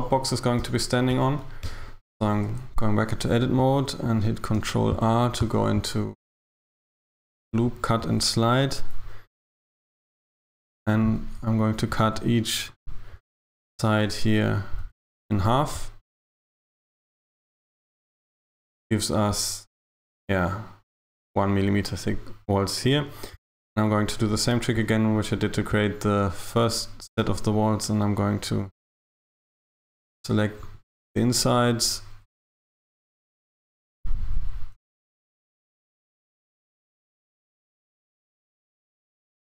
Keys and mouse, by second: 0.6 Tab, 1.2 Tab, 1.7 Tab, 2.3 a, 2.5 a, 3.6 r, 4.6 Escape, 6.7 click, 8.1 r, 9.9 r, 12.1 ctrl+r, 14.9 ctrl+r, 17.3 ctrl+r, 25.2 click, 27.2 right click, 28.6 right click, 30.7 ctrl+right click, 33.3 ctrl+right click, 35.8 ctrl+right click, 39.0 ctrl+right click.